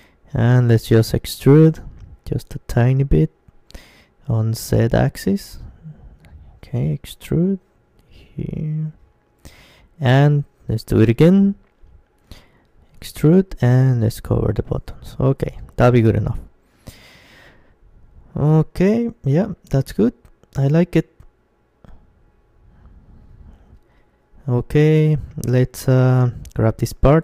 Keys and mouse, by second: 4.2 e, 9.7-12.3 drag, 11.3-13.5 middle drag, 12.1 e, 12.6 e, 13.5 e, 14.1-15.8 drag, 14.9 Tab, 15.8-21.1 middle drag, 21.0-22.3 drag, 21.0-22.7 right drag, 22.3 Tab, 23.5 Tab, 23.5-25.9 right drag, 26.3-27.2 middle drag.